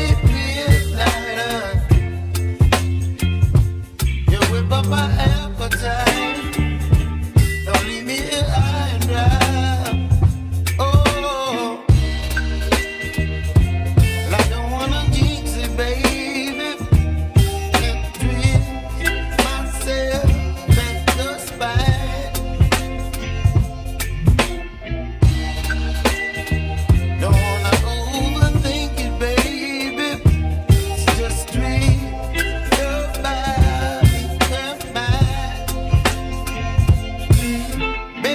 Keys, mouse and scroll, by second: 0.9-1.4 scroll up 2, 1.7 ctrl+middle click, 2.6-3.4 scroll down 2, 3.8 3, 4.3 click, 5.3 shift+click, 5.7 middle click, 6.4 shift+click, 7.0 shift+click, 8.4 ctrl+e, 10.0-14.6 middle drag, 15.7 shift+d, 17.7-19.5 scroll up 1, 19.5 p, 21.0 Tab, 21.8 click, 23.1 Tab, 23.5 e, 24.6 click, 25.7 a, 28.6 alt+e, 35.8 s.